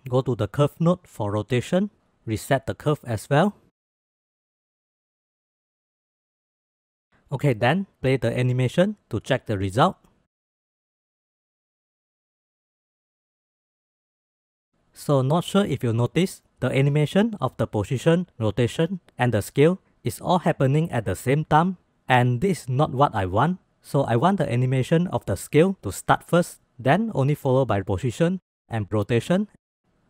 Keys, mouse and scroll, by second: 0.1 middle drag, 1.0 middle click, 2.3-3.4 drag, 4.3 click, 5.1 click, 6.0 click, 7.8-8.9 drag, 9.0 space, 10.0 space, 10.1 click, 10.2 space, 11.6-14.2 drag, 11.6 space, 14.2 space, 15.2 click, 16.3 click, 19.4 click, 22.2 space, 22.6 click, 23.5 ctrl+s, 24.5 click, 25.0-25.3 middle drag, 25.8-26.6 drag, 26.6-26.9 middle drag, 27.2 middle click, 27.7-28.2 drag, 28.6 middle drag, 29.2-29.8 drag.